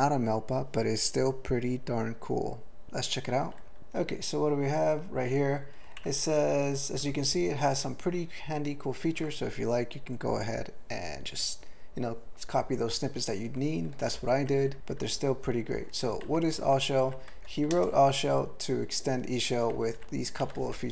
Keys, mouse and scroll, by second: 3.8 ctrl+l, 6.0-6.7 ctrl+n, 7.0 ctrl+p, 7.2 ctrl+p, 7.3 ctrl+p, 7.7 ctrl+p, 14.1 ctrl+n, 14.6 ctrl+n, 14.7 ctrl+n, 16.0 ctrl+p, 16.2 ctrl+n, 16.4 ctrl+n, 16.6 ctrl+n, 16.8 ctrl+n, 17.0 ctrl+n, 17.3 ctrl+l, 17.7 ctrl+space, 17.8 ctrl+e, 19.7 ctrl+n, 19.9 ctrl+n, 20.4 ctrl+g, 20.5 ctrl+a, 20.7 ctrl+l.